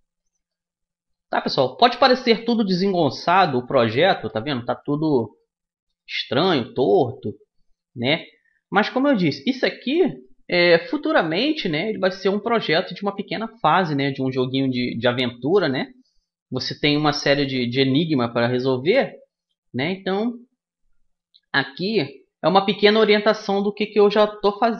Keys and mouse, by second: 3.4 right click, 4.0-5.4 middle drag, 5.6-7.9 right drag, 7.9 middle click, 8.3-10.0 right drag, 10.0-15.0 middle drag, 15.7 middle click, 18.0 middle click, 23.0-24.7 middle drag.